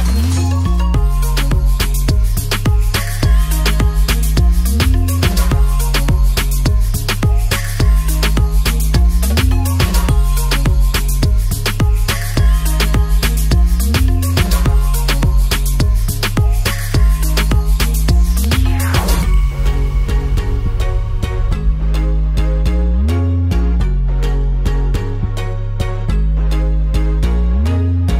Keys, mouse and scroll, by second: 0.4 click, 1.1 drag, 1.8 drag, 4.7 click, 5.5 drag, 8.9 click, 10.1 drag, 10.6 click, 16.2 shift+click, 17.1 ctrl+l, 18.1 a, 19.0 ctrl+s, 19.4-19.8 alt+drag, 21.0 shift+a, 21.1 shift+drag, 21.5 click, 22.3 Tab, 23.1 3, 23.2 click, 24.1 click, 24.8 drag, 25.1 click, 25.6 Tab, 26.3 ctrl+s.